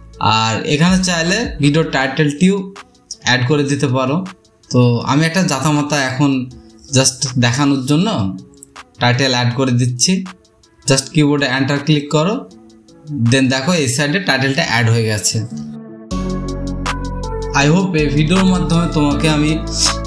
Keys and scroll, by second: 3.2-10.8 typing, 12.3-13.8 typing, 15.4 Return.